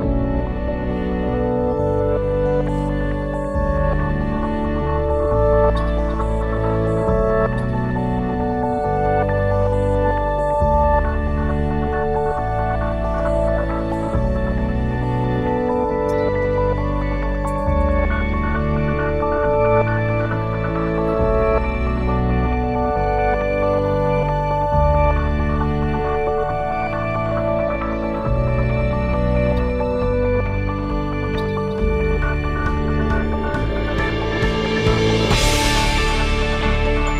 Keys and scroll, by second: 2.4 BackSpace, 5.2 ctrl+c, 8.2 ctrl+v, 9.5 Return, 12.3 a, 24.4 ctrl+s, 33.2-34.7 typing, 35.0 Return.